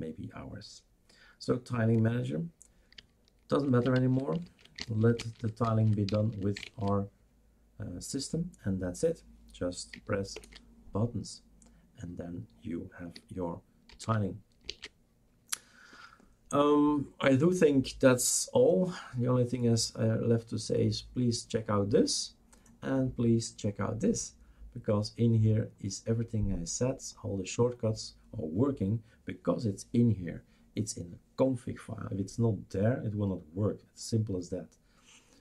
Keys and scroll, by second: 4.0 shift+super+q, 4.5 shift+super+q, 4.9 shift+super+q, 10.5 shift+super+Return, 13.9 shift+super+q, 14.7 shift+super+q.